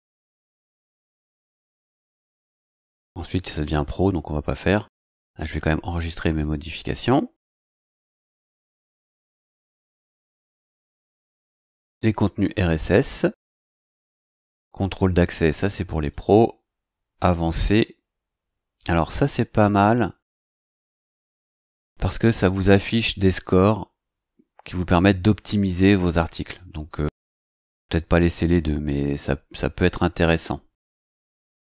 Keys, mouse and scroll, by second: 1.7 scroll down 2, 2.5-2.9 scroll down 1, 2.9-3.6 scroll up 4, 3.7-4.3 scroll down 3, 4.7-5.1 scroll up 2, 5.2-5.8 scroll down 3, 6.3 click, 9.2-10.9 scroll up 8, 11.8 click, 13.8 click, 16.0 click.